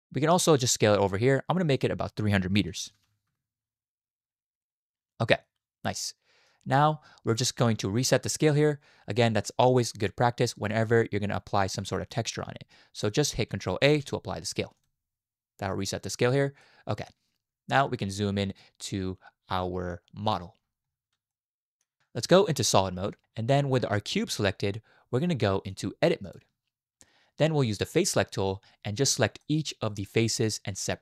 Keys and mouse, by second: 1.8-3.3 drag, 3.0 0, 5.9-6.3 drag, 6.3 middle click, 11.6 middle click, 13.8 ctrl+a, 16.6-17.1 middle drag, 21.3 shift+middle drag, 21.4-21.8 shift+drag, 22.7 z, 23.2 shift+click, 25.8-26.3 right drag, 29.4 middle click.